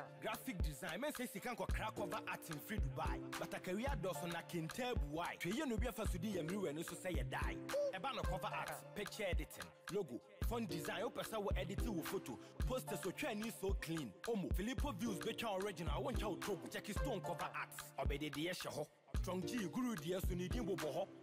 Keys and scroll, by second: 8.7 ctrl+-, 14.6 ctrl+t.